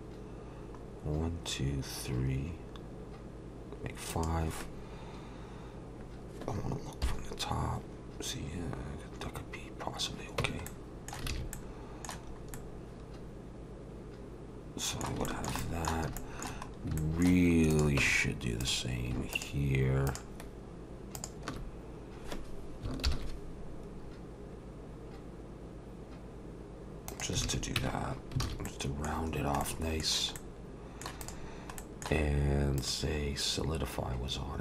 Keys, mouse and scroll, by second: 7.1 KP_7, 9.2-10.0 scroll down 2, 10.4 Tab, 10.7 middle click, 11.3 alt+a, 11.5 middle click, 12.3 scroll up 2, 12.5 middle click, 15.3 shift+middle click, 15.6 middle click, 16.2 shift+middle click, 16.7 scroll up 2, 17.0 shift+middle click, 17.7 click, 18.0 Tab, 18.6 click, 19.3 shift+click, 20.1 click, 23.1 ctrl+shift+b, 27.4 alt+a, 27.8 Tab, 28.1 scroll down 2, 28.4 alt+a, 28.7 middle click, 29.3 scroll down 1, 29.6 middle click, 30.4 middle click, 31.2 click, 31.8 middle click, 32.8 click.